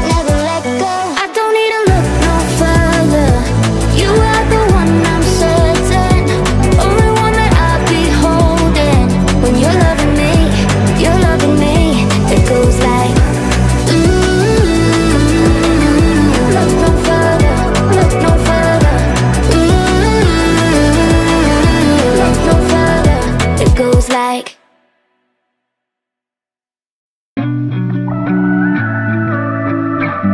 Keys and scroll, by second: 4.8-5.8 typing, 8.0-12.1 typing, 13.5-16.1 typing, 17.2 u, 22.5-23.7 typing.